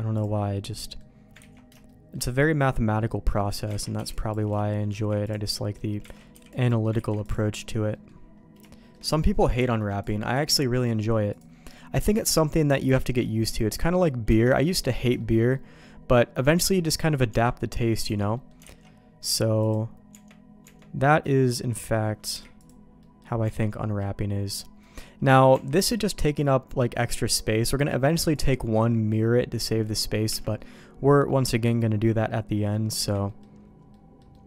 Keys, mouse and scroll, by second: 0.5 middle click, 1.3 ctrl+z, 1.8 shift+middle click, 3.5 alt+middle click, 3.7 alt+a, 3.9 b, 4.4 Escape, 5.1 ctrl+e, 5.5 middle click, 6.1 alt+a, 6.3 b, 6.9 ctrl+e, 7.9 middle click, 8.7 shift+middle click, 10.0 click, 10.5 ctrl+e, 12.1 middle click, 13.1 ctrl+z, 13.2 middle click, 14.2 Tab, 14.7 middle click, 15.1 shift+middle click, 15.5 middle click, 16.5 middle click, 18.0 Tab, 18.3 middle click, 18.6 alt+x, 19.6-20.6 drag, 20.6 Tab, 21.0 middle click, 21.7 a, 22.3 u, 23.0 middle click, 23.4 Tab, 23.7 middle click, 24.8 middle click, 25.5 Tab, 25.8 middle click, 26.7 middle click, 29.8 middle click, 30.2 Tab, 30.5 middle click, 31.3 middle click, 31.7 middle click, 32.2 middle click, 32.9 Tab, 33.2 middle click, 33.9 middle click, 34.3 middle click.